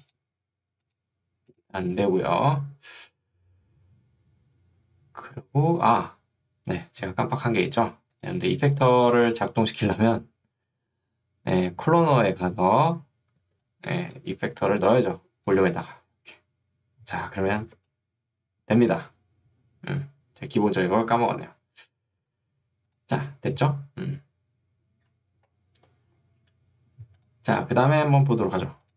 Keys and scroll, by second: 10.7 ctrl+2, 12.9 Escape, 13.5 ctrl+2, 14.5 Escape, 17.7 ctrl+2, 19.9 Escape.